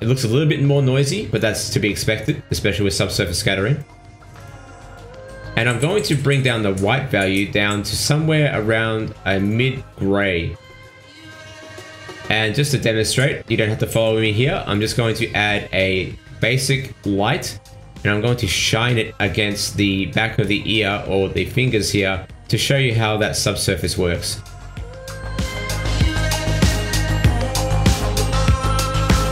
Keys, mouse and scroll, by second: 0.4 click, 1.1 click, 1.9 click, 9.2 click, 9.9 click, 12.2 scroll up 2, 12.3 middle click, 14.3 click, 15.2 click, 15.5 middle click, 16.0 shift+a, 18.9 middle click, 20.3 click, 22.9 scroll down 3, 24.4-24.8 scroll down 3, 24.8 middle click, 25.6 click, 27.2 middle click.